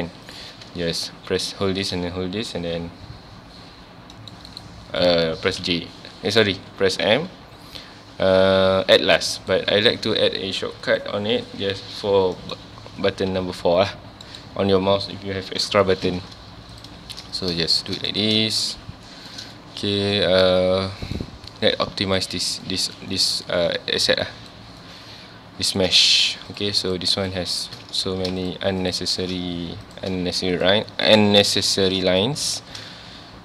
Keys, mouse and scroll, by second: 0.2 click, 1.4 shift+click, 7.1 m, 16.7 click, 17.3 click, 17.8 shift+click, 18.5-26.2 shift+middle drag, 26.2 2, 26.5 click, 26.9 shift+click, 27.2 shift+click, 28.1 ctrl+z, 28.4 shift+click, 28.8 shift+click, 29.9 click, 30.5 shift+click, 31.5 shift+click, 32.4 ctrl+x, 33.0 1.